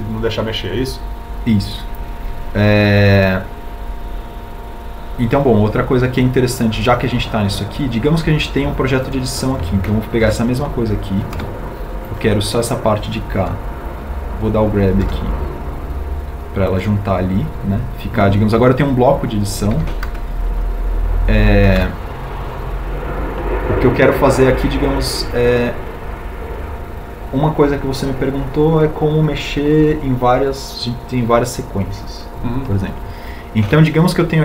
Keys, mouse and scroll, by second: 12.7 g, 13.7 Escape, 17.3 g, 22.1 alt+e.